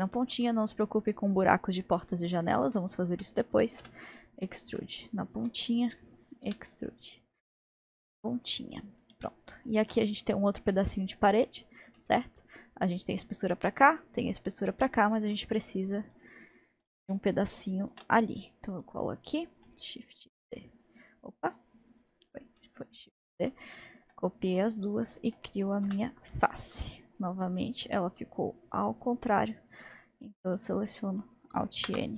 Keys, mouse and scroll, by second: 0.0-0.4 scroll down 1, 0.4-3.8 middle drag, 3.8 e, 4.7-6.5 middle drag, 6.5 e, 7.3-7.8 scroll down 2, 7.8-10.0 middle drag, 10.0-10.7 scroll up 2, 10.7-16.0 middle drag, 11.7 scroll, 11.9 scroll up 1, 16.0 click, 18.7 shift+d, 20.3 shift+d, 22.3 shift+d, 22.6-25.0 middle drag, 25.0 shift+click, 25.9 f, 26.7-30.4 middle drag, 30.4 click, 30.8 click.